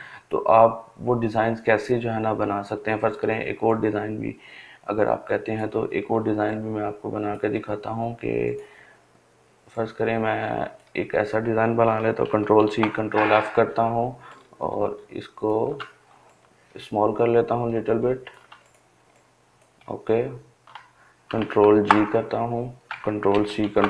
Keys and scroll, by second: 10.8 ctrl+c, 11.1 ctrl+f, 20.2 ctrl+g, 21.9 ctrl+c, 22.2 ctrl+f.